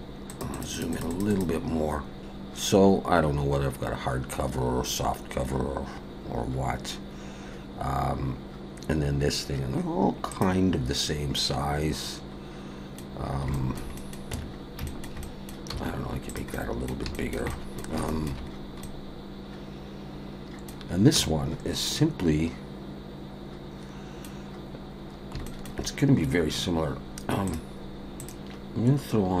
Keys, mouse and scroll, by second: 11.4 middle click, 13.3 scroll up 2, 13.5 shift+middle click, 14.0 middle click, 14.3 Tab, 14.9 shift+middle click, 15.2 middle click, 15.7 s, 16.5 middle click, 17.1 shift+middle click, 17.5 middle click, 18.1 shift+middle click, 18.5 scroll up 2, 18.8 middle click, 21.2 Tab, 21.4-21.7 scroll down 2, 21.8 middle click, 25.4 shift+middle click, 27.5 click, 28.2 click.